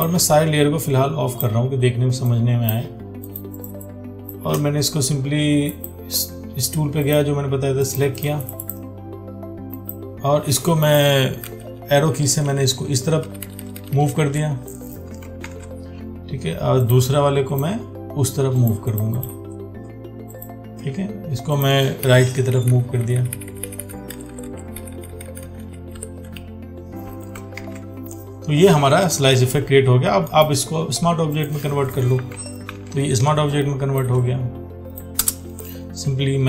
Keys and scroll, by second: 15.7 ctrl+d, 27.9 ctrl+d, 33.0 ctrl+t.